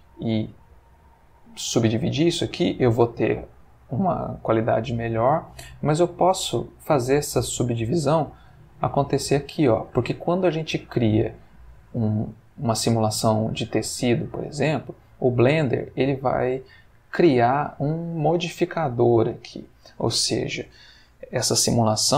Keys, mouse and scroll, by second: 0.5 right click, 3.5 Tab, 5.3 click, 8.2 click, 11.9 click, 12.3 click, 15.2 click.